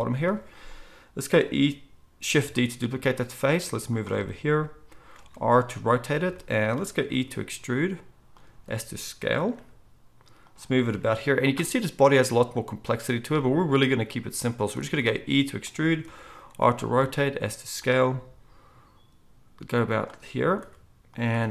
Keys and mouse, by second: 2.5 shift+d, 5.1 r, 7.1 e, 8.5 s, 9.5 g, 10.9 r, 14.8 e, 16.0 r, 16.9 s, 18.1 g, 20.6 r, 21.4 e.